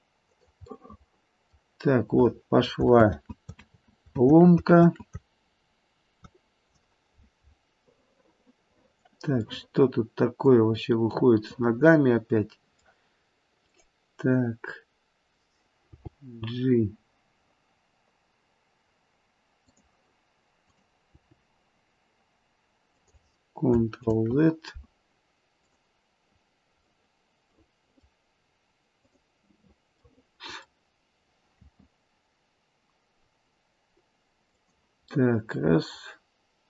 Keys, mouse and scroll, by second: 0.6 middle click, 3.0 ctrl+z, 3.6 ctrl+z, 4.7 ctrl+z, 7.9 middle click, 8.1 middle click, 8.9-9.5 scroll up 1, 9.5 middle click, 9.6 middle click, 9.8 middle click, 11.4 middle click, 13.6 click, 15.8 g, 20.6 click, 21.2 g, 24.1 ctrl+z, 25.5 click, 26.9 middle click, 27.5 middle click, 28.9 click, 30.0 middle click, 31.6 r, 35.1 middle click, 35.4 middle click, 35.6 middle click.